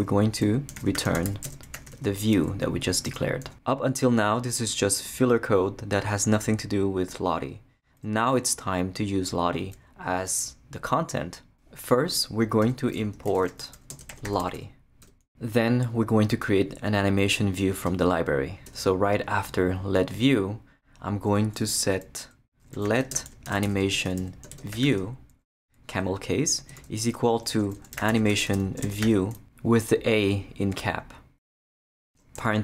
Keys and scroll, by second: 0.5-2.4 typing, 12.6 Return, 12.9-14.9 typing, 15.0 Return, 17.9 Return, 22.5-29.9 typing, 31.8 Return, 32.4 shift+o.